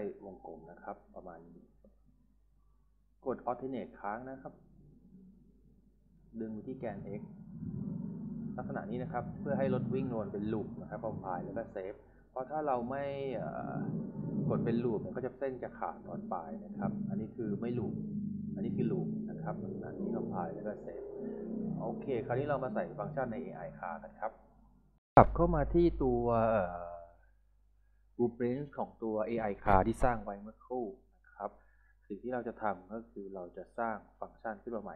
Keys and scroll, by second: 5.6 a, 8.3-9.5 typing, 19.2 s.